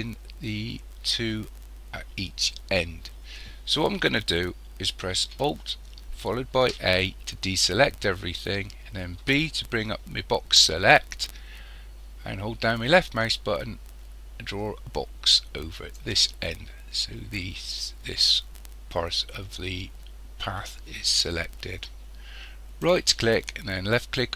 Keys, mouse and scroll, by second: 6.6 alt+a, 9.2 b, 22.8-24.3 right drag.